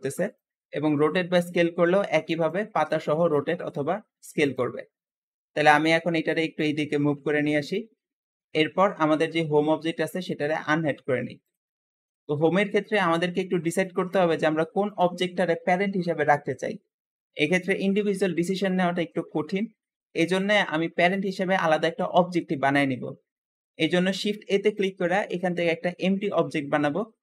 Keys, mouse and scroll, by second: 0.6 r, 1.3 s, 2.8 shift+middle click, 3.1 g, 4.7 scroll down 1, 5.2 middle click, 6.1 click, 10.1 click, 11.3 click, 11.8 middle click, 12.6 scroll up 3, 13.1-14.3 shift+middle drag, 14.3-14.7 scroll up 2, 14.7 shift+click, 17.9 g, 19.6-20.2 shift+middle drag, 20.2 shift+click, 21.3-21.7 scroll down 2, 22.2-24.0 shift+middle drag, 24.0 shift+a.